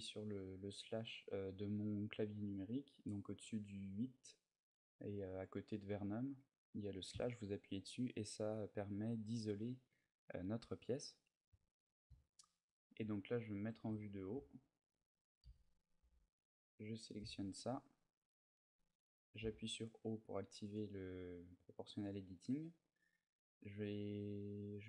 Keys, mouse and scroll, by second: 6.9 KP_Divide, 9.0 middle click, 10.0 middle click, 12.0 middle click, 12.2 shift+middle click, 12.5 middle click, 13.3 KP_7, 13.6 Tab, 14.3 shift+middle click, 15.2 z, 15.8 b, 17.6-19.2 scroll up 3, 19.2 o, 20.4 click.